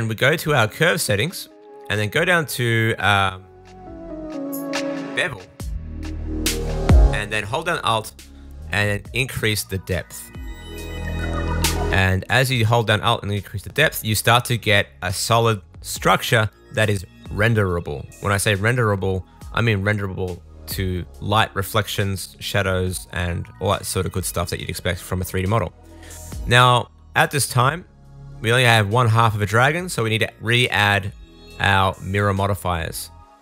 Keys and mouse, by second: 1.0-3.5 middle drag, 16.8-18.5 middle drag, 18.5-33.4 drag, 28.8 middle click, 28.8 right click, 29.9-33.4 middle drag, 29.9-33.4 right drag.